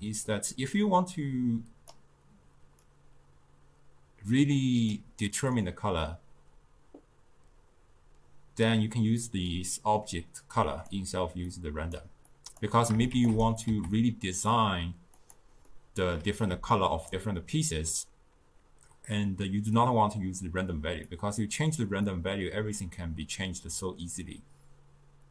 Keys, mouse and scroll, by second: 1.2 click, 2.9-5.9 drag, 9.6 drag, 11.5-12.4 drag, 13.2 shift+d, 13.7 s, 15.7 scroll up 2, 15.8 middle click, 16.6 scroll down 2, 16.8-19.8 ctrl+middle drag, 21.1 click, 22.1-25.1 drag.